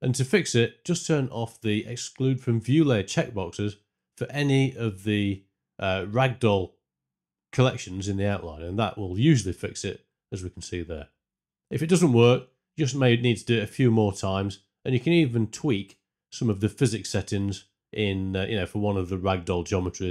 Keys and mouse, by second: 6.5 click, 7.4 space, 9.4 space, 9.7 shift+Left, 17.5 click, 18.9 click.